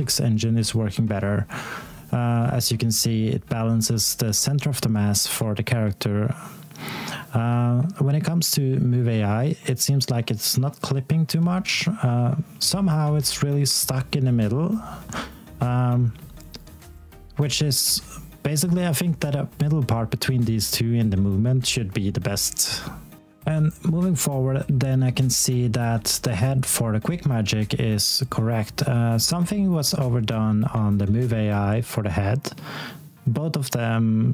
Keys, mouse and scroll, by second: 23.2 scroll down 1, 23.5 alt+click, 28.1 click, 29.0-29.4 scroll down 1, 29.6 alt+middle click, 30.2 alt+click, 31.1 click.